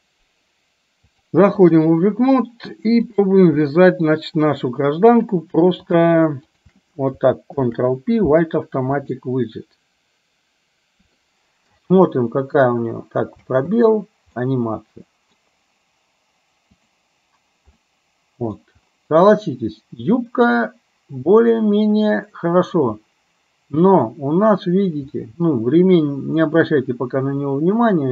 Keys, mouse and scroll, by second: 1.2-1.9 drag, 3.2 click, 3.8-4.2 shift+middle drag, 7.7 ctrl+p, 11.3-11.7 middle drag, 13.5 space, 14.5-15.5 middle drag, 16.9 drag, 17.9-18.8 middle drag, 19.4-22.9 middle drag, 25.3 middle drag.